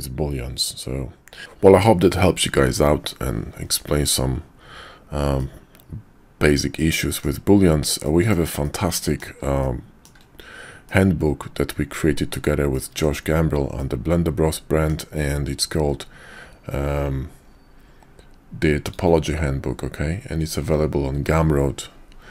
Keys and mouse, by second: 5.3-7.2 middle drag, 8.0-8.3 shift+middle drag, 8.6-9.2 middle drag, 9.6-10.1 shift+middle drag, 10.8-12.0 middle drag, 12.7-13.0 shift+middle drag, 13.7 middle drag, 14.0-22.3 drag.